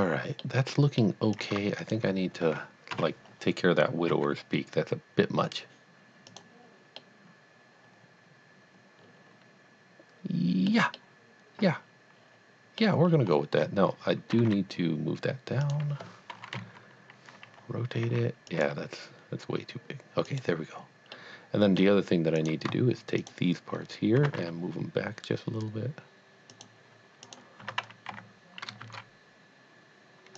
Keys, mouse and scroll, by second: 0.5 middle click, 1.4 click, 1.8 shift+click, 3.2 KP_7, 4.1 g, 6.3 click, 7.0 middle click, 7.4 middle click, 11.0 middle click, 13.1-13.8 scroll up 2, 14.3 g, 14.8 z, 15.7 click, 16.5 KP_1, 18.0 KP_1, 18.0 r, 18.6 g, 20.3 click, 21.1 middle click, 21.4 middle click, 22.4 click, 23.2 shift+click, 24.2 g, 24.8 y, 26.5 click, 27.6 g, 28.2 y, 28.8 shift+z.